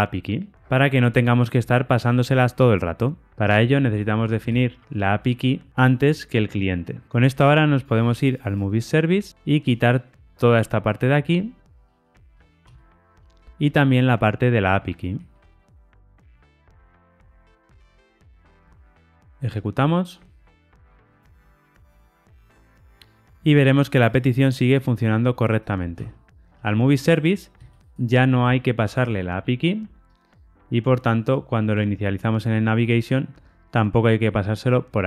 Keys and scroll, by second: 4.8 super+x, 6.4 super+v, 8.6 super+b, 14.9 ctrl+shift+Right, 19.5 ctrl+r, 19.5 shift+F10.